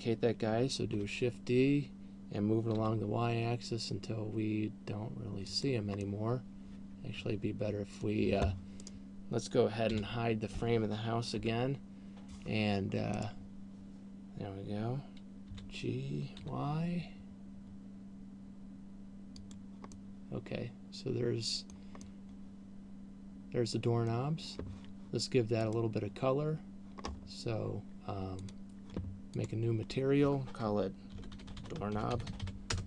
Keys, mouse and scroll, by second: 1.5 shift+d, 6.0 click, 6.0 middle click, 9.2 right click, 10.5 h, 11.7 KP_3, 13.5 right click, 15.5 g, 19.7 click, 20.2 middle click, 22.5 middle click, 26.2 click, 27.5 scroll up 5, 28.7 click, 29.7 click.